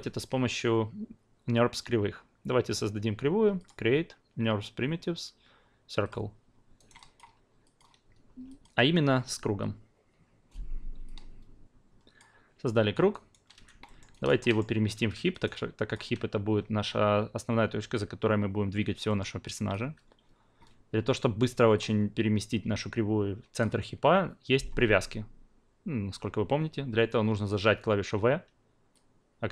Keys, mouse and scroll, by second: 6.0 click, 6.8 alt+right click, 7.0 alt+click, 7.6 alt+click, 8.5 alt+click, 11.0-12.5 drag, 12.6-13.1 alt+drag, 13.1 alt+right click, 13.8 alt+middle click, 14.1 alt+right click, 14.4 alt+middle click, 15.3 alt+right click, 15.5-18.9 alt+drag, 19.1-19.4 alt+middle drag, 19.4 alt+click, 21.7-23.6 drag, 28.2 v, 28.9 click.